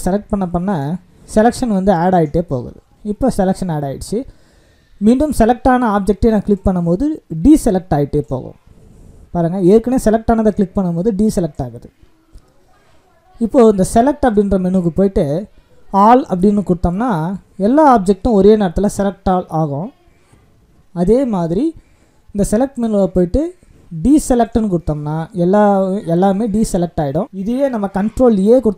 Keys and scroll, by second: 28.5 ctrl+a.